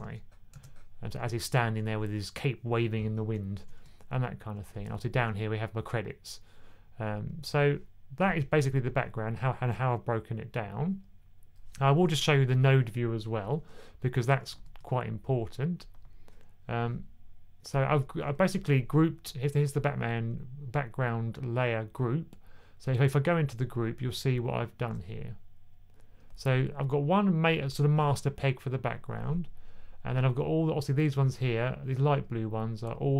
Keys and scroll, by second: 0.4 super+z, 3.4 1, 3.7 1.